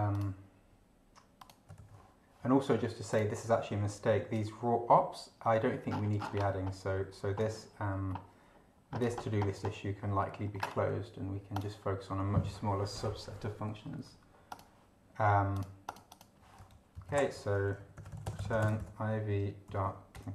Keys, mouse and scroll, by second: 0.1 click, 1.4 click, 1.7 ctrl+v, 3.1 click, 5.9-7.1 scroll down 4, 7.3-7.9 scroll down 2, 8.1-8.6 scroll down 2, 8.6 scroll down 1, 8.9-10.1 scroll up 2, 10.1-10.5 scroll up 1, 11.5 click, 14.5 click, 15.5 click, 16.9 Down, 17.1 ctrl+shift+Left, 17.6 ctrl+shift+r, 17.8 ctrl+shift+e, 18.0 ctrl+shift+t, 18.1 ctrl+shift+r, 18.2 ctrl+shift+space, 18.4 ctrl+shift+v, 18.5 ctrl+shift+y, 18.6 ctrl+shift+space, 18.7 ctrl+shift+BackSpace, 18.8 ctrl+shift+., 19.7-20.3 typing, 20.1 Return.